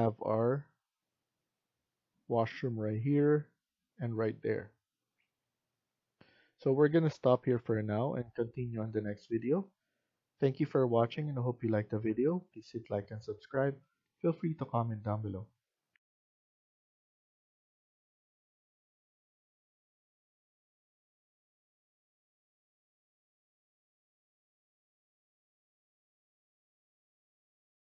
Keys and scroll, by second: 6.1 F1.